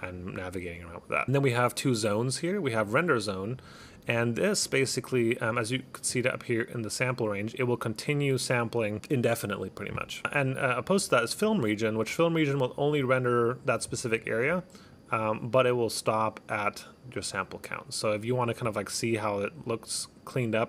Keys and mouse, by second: 2.9 click, 4.2 click, 5.2 click, 10.2 click, 11.5 click, 12.1 click, 12.9 click, 13.5 click, 15.0 click, 17.8 click.